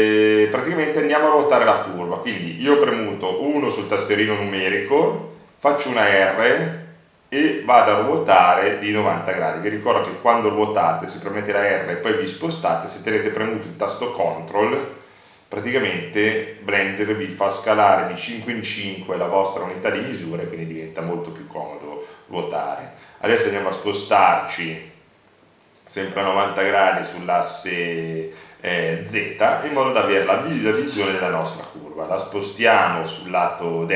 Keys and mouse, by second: 2.2 KP_1, 3.8 KP_1, 3.8 r, 19.9 click, 21.0 click, 21.1-22.4 middle drag, 22.4 click, 22.8-26.9 middle drag, 28.8-31.1 middle drag, 31.2-32.2 middle drag.